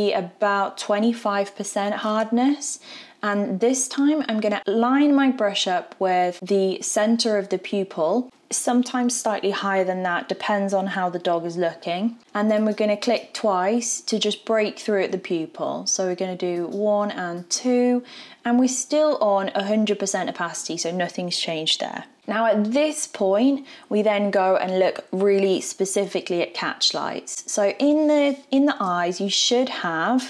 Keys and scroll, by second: 28.7 alt+v.